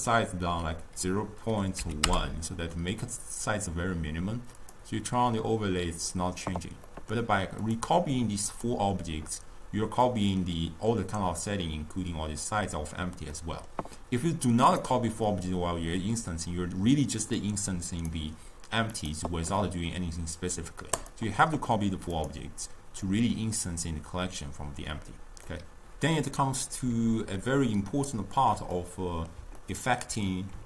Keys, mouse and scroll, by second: 4.7 click, 7.0-7.7 middle drag, 7.7 click, 8.7 click, 10.1-13.2 middle drag, 13.4-14.8 middle drag, 14.8 click, 17.5 click, 19.0 click, 21.1 click, 22.2 click, 23.2-25.6 middle drag, 27.4-30.6 ctrl+middle drag.